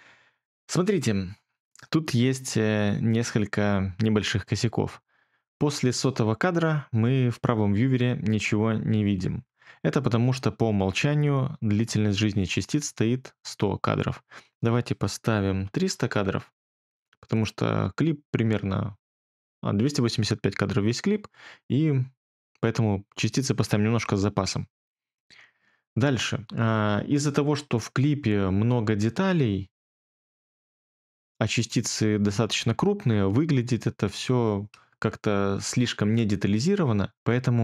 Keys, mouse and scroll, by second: 15.6 typing, 34.5 middle click, 35.2 middle click.